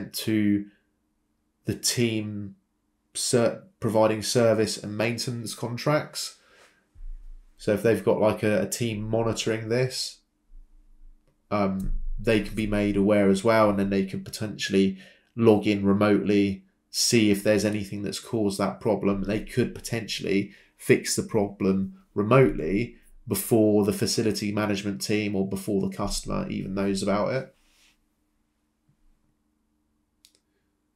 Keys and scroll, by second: 20.8 ctrl+c, 21.0 ctrl+v.